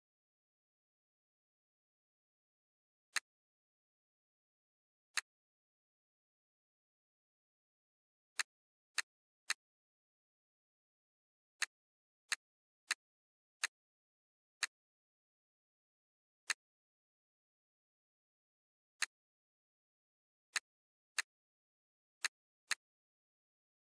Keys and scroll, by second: 20.1 ctrl+z.